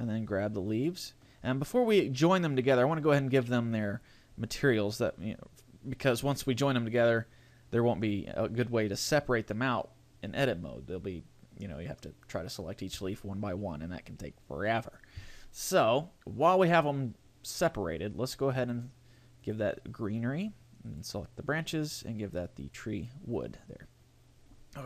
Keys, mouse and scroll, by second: 0.3 right click, 18.5 click, 20.9 right click, 21.9 click.